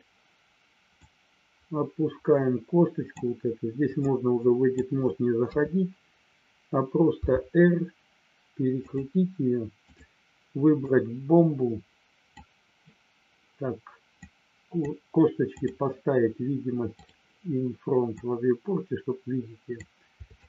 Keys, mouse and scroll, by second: 1.0-3.1 drag, 4.0 click, 5.4 KP_3, 7.3 r, 8.7 click, 9.7 click, 10.9-12.5 drag, 14.1 click, 15.5 click, 17.0 click, 18.1-19.7 drag.